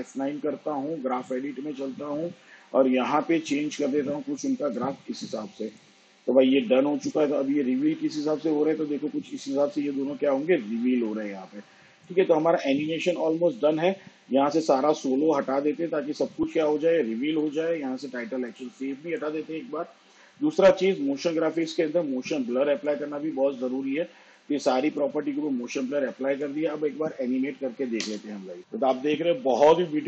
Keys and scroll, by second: 1.4 F9.